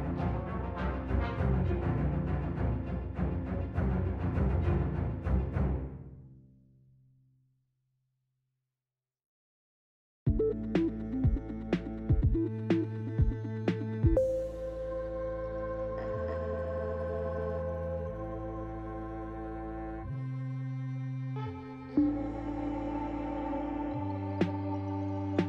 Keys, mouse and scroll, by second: 0.0-0.5 scroll down 3, 0.5 middle click, 2.2-2.7 scroll down 2, 2.7 middle click, 5.4 click, 6.4 click, 8.4 ctrl+c, 9.0 click, 10.6 ctrl+v, 12.1 scroll down 2, 12.6 click, 13.4 shift+middle click, 14.8 click, 15.8 shift+click, 16.6 click, 17.4 click, 18.5 click, 19.3 shift+click, 19.7 middle click, 20.7-21.0 scroll down 2, 21.7 shift+click, 22.2-22.5 scroll down 2, 22.7 middle click, 23.6-24.2 scroll up 4, 25.0 shift+click.